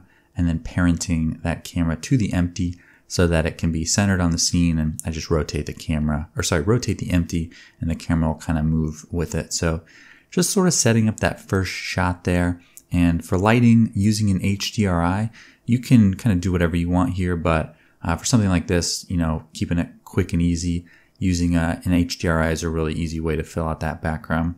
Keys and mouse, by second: 2.0-3.9 drag, 3.9-5.2 middle drag, 4.2 r, 7.6-19.5 drag, 23.9 KP_0.